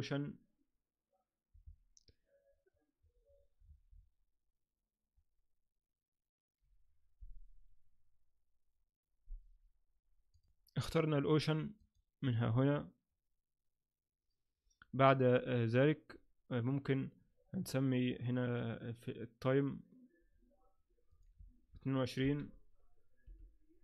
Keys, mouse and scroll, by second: 10.5 Tab, 11.8 click, 21.1 click, 21.6 2, 23.2 i.